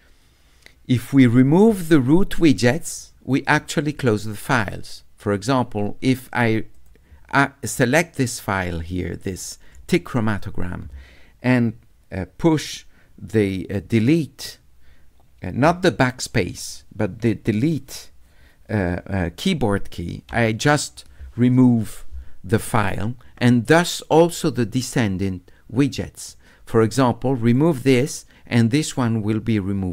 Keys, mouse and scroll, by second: 6.8 click, 27.5 click.